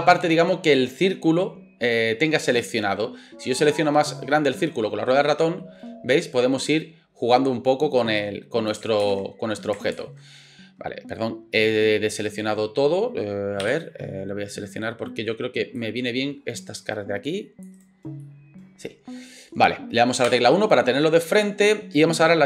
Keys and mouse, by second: 9.0 ctrl+z, 9.9 ctrl+z, 20.3 KP_1.